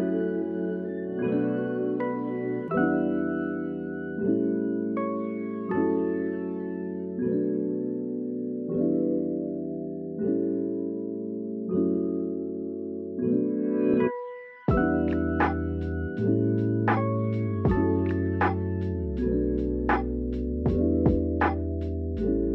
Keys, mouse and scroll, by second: 0.2 shift+a, 4.4 click, 6.6 g, 7.2 s, 7.7 click, 8.3 shift+middle drag, 8.7 shift+middle click, 9.2 s, 9.5-10.0 drag, 10.0 g, 12.1 shift+middle click, 12.3 Tab, 13.5 r, 15.3 click, 15.5 Tab, 16.0 Tab, 16.2 shift+middle click, 16.9 ctrl+r, 20.1 click, 20.7 shift+click, 21.3 s, 21.8 click.